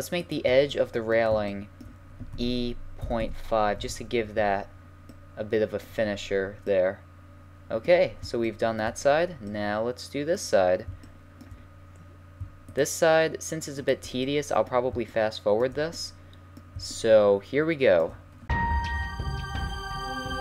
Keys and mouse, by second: 2.3 e, 4.4 a, 12.7-15.7 middle drag, 18.5-20.4 typing, 18.8 right click.